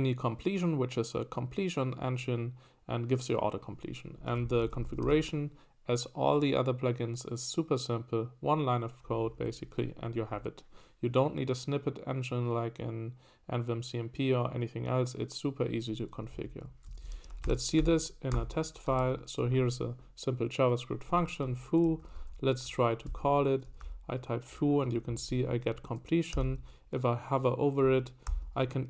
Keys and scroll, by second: 4.3 Escape, 4.4-5.5 typing, 16.3 Escape, 16.7-18.8 typing, 20.3 typing, 21.7-24.3 typing, 26.3 ctrl+n, 28.3 shift+9.